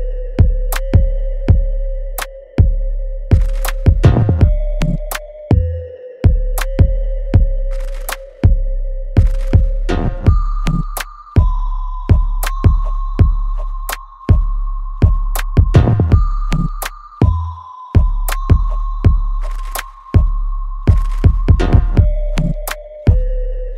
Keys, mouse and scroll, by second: 0.9 alt+right click, 1.3 alt+click, 1.8 alt+right click, 2.2 alt+click, 3.2 alt+right click, 4.3 alt+click, 4.9 alt+right click, 5.8 alt+right click, 6.7 ctrl+b, 7.4 middle click, 7.7-9.1 alt+right drag, 9.1-11.4 drag, 11.4-13.7 ctrl+drag, 13.7 alt+click, 14.1 alt+middle click, 14.6 right click, 15.5 alt+middle click, 17.1-18.8 ctrl+drag, 18.8 right click, 19.2 alt+click, 19.9 right click, 20.3 click, 21.1 alt+right click, 21.7-23.3 alt+middle drag, 23.3 ctrl+s.